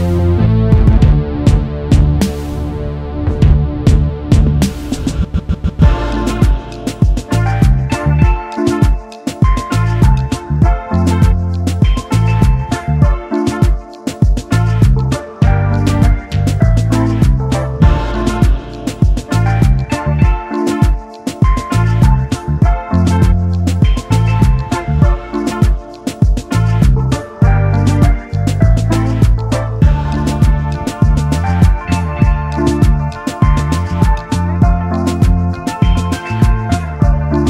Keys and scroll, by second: 2.0 space, 3.2 space, 3.2 space, 10.9 t, 11.0 t, 11.2 space, 11.5 a, 25.7-27.5 typing, 27.6 Return, 32.8 ctrl+c, 34.1 ctrl+v.